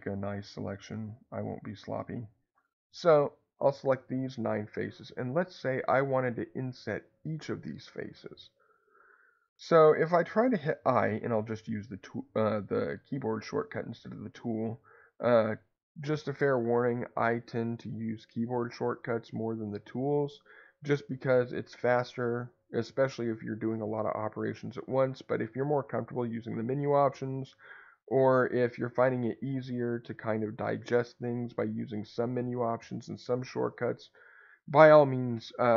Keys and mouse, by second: 0.8 click, 1.8 click.